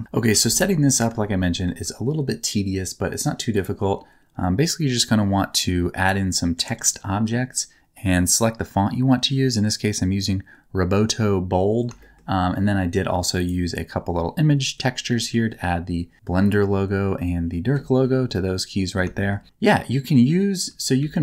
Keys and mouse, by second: 0.3 KP_7, 1.4 shift+middle click, 12.0 shift+middle click, 15.1 middle click, 16.4-18.4 drag, 18.4 middle click, 19.1 shift+middle click, 20.9 shift+a.